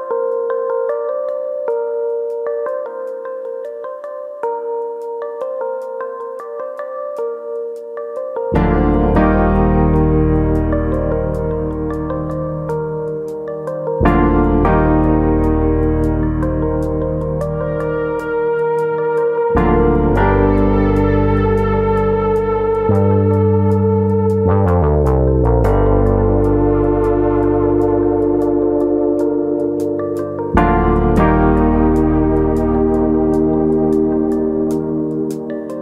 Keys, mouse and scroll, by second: 0.4-1.6 scroll up 1, 1.6 KP_1, 2.6 middle click, 3.1-3.5 scroll up 2, 3.4 middle click, 5.2 click, 6.9 middle click, 8.8 click, 11.4 click, 12.2 KP_1, 13.1 Tab, 14.3 click, 15.2 click, 16.6 x, 18.3 click, 20.7 click, 22.1-23.2 scroll up 1, 23.2 scroll up 1, 23.8 alt+click, 25.1 click, 26.4 click, 29.8 click, 30.8 s, 32.0 right click, 32.7 click, 33.1 click, 34.6 s.